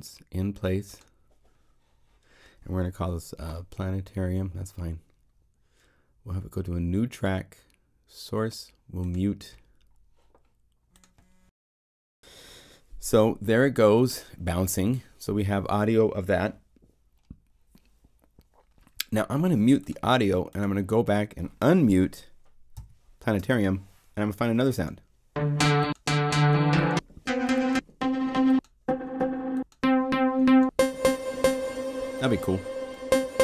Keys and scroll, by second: 22.7 ctrl+m.